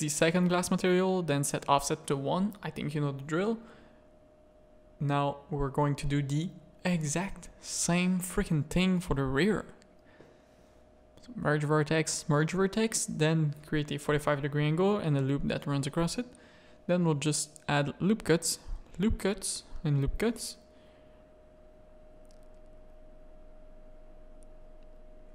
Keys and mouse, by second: 1.3 click, 2.3 middle click, 2.9 Tab, 3.1 alt+a, 3.4 middle click, 3.8 shift+click, 4.4 click, 4.8 middle click, 5.0 Tab, 5.4 z, 5.6 a, 5.7 middle click, 6.4 1, 7.9 click, 8.2 g, 9.2 g, 9.8 a, 10.0 shift+click, 10.9 g, 11.9 click, 12.2 g, 12.9 a, 13.2 middle click, 13.5 z, 13.9 ctrl+r, 15.6 click, 16.3 ctrl+r, 18.2 ctrl+r, 20.7 middle click, 21.5 shift+middle click, 21.7 z, 22.0 a, 22.4 click, 23.0 Tab, 23.4 click, 24.0 Tab, 24.2 a, 24.9 z.